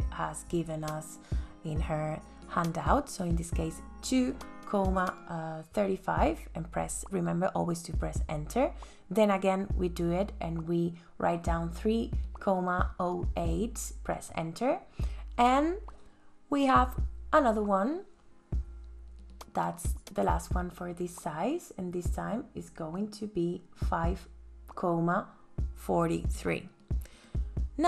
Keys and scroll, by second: 1.1 KP_Enter, 5.8 KP_3, 6.5 ,, 6.7 KP_0, 7.1 KP_8, 7.5 KP_Enter, 15.0 KP_4, 15.4 ,, 15.6 KP_7, 16.3 KP_Enter, 21.1 KP_5, 22.9 ,, 23.3 KP_4, 23.6 KP_3, 24.1 KP_Enter, 27.3 ctrl+s.